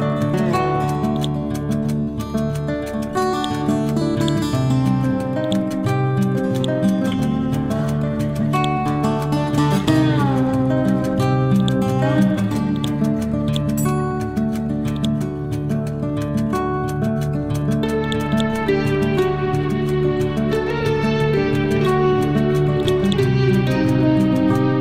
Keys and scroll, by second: 19.8 F12, 20.4 3, 20.6 Return.